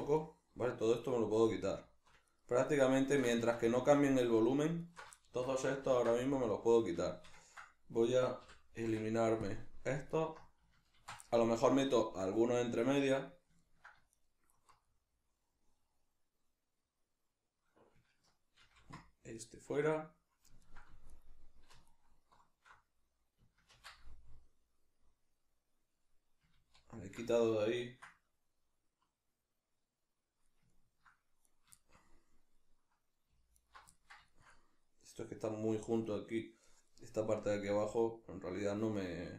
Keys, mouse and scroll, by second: 0.1-1.6 middle drag, 1.6 alt+right click, 2.3 alt+shift+right click, 2.7 alt+shift+right click, 3.4 ctrl+z, 3.9 alt+shift+right click, 4.3 alt+shift+right click, 4.8 alt+shift+right click, 5.1-8.1 shift+middle drag, 5.9 ctrl+x, 8.1 right click, 8.4 l, 10.1 alt+right click, 11.0 ctrl+x, 11.3-13.1 middle drag, 13.6-14.1 ctrl+middle drag, 14.1 alt+right click, 14.9-21.1 middle drag, 18.6 ctrl+x, 21.1 alt+right click, 21.9 alt+shift+right click, 23.7 ctrl+x, 23.9-31.5 middle drag, 26.6 ctrl+z, 31.5 right click, 31.8-33.6 shift+middle drag, 33.6 alt+right drag, 33.9-39.3 ctrl+middle drag.